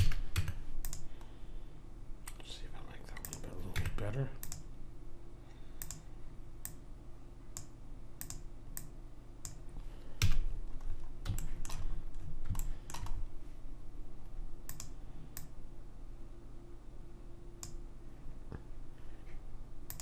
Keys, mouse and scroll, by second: 0.4 Tab, 1.9-3.1 middle drag, 3.2 click, 3.7 Tab, 10.2 a, 10.7-12.9 middle drag, 14.7 click, 19.8-20.0 drag.